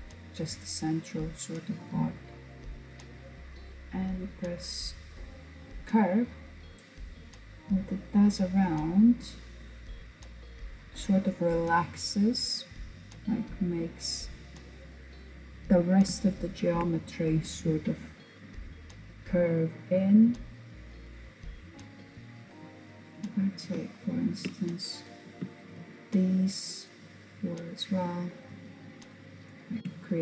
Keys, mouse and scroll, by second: 3.3 click, 5.2-5.9 scroll down 2, 5.9-10.7 middle drag, 11.6-12.6 middle drag, 12.6-14.0 scroll up 1, 14.0-15.3 scroll down 1, 15.3-18.3 shift+middle drag, 20.7-21.1 scroll down 2, 21.1 middle click, 22.1-22.9 scroll up 1, 22.9-24.1 shift+middle drag, 24.1 click, 24.6 shift+click, 25.3 shift+click, 25.9 shift+click, 26.3 shift+click, 26.7 shift+click, 27.4 shift+click, 28.1 shift+click, 28.5 shift+click.